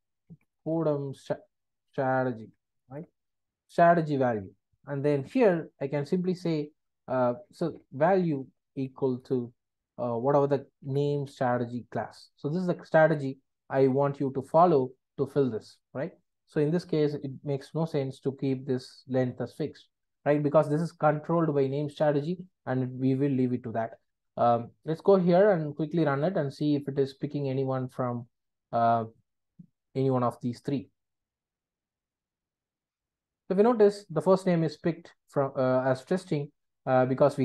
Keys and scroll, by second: 5.0 Return, 9.2 Return, 12.2 Return, 17.9 super+BackSpace.